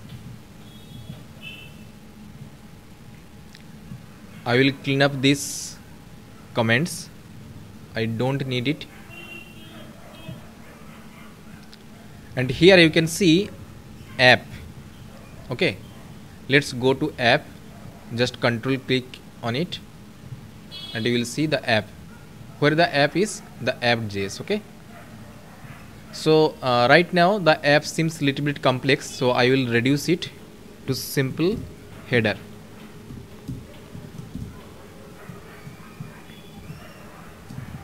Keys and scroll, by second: 0.8 ctrl+s.